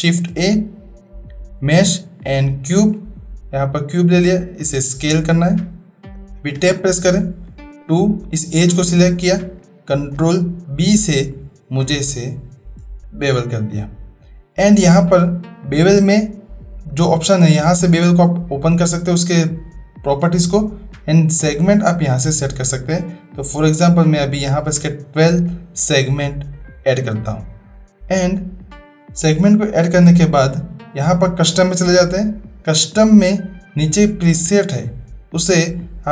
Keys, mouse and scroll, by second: 0.1 shift+a, 3.6-4.3 drag, 4.7 s, 6.5 Tab, 7.6 2, 8.2 click, 10.1 ctrl+b, 16.8 click, 18.0 click, 21.4-24.6 drag, 31.0 click, 34.3-36.1 drag.